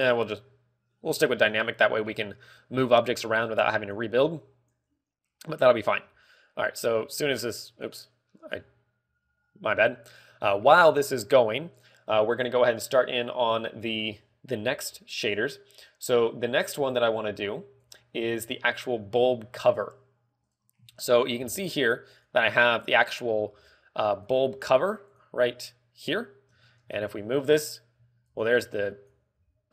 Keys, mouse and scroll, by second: 0.0 click, 5.4 click, 6.7 z, 7.2 z, 8.3 click, 12.3 click, 21.0 click, 21.5 shift+middle click, 22.0-22.4 scroll up 3, 22.3 z, 23.0 right click, 23.9 right click, 25.1 right click, 26.0 right click, 27.3 g, 28.9 right click.